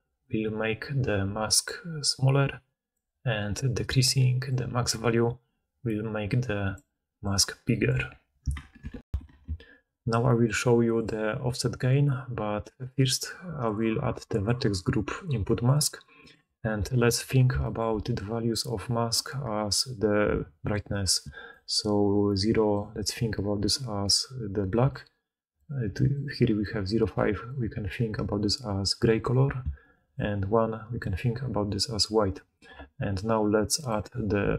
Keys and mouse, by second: 9.1 ctrl+alt+Insert, 9.1 ctrl+z, 16.2-26.1 drag, 21.1 d, 21.4-26.1 right drag, 22.7 d, 22.8 d, 24.7-27.6 d, 29.5 d, 29.8 d, 29.9 d, 30.0 d, 33.4-34.5 drag.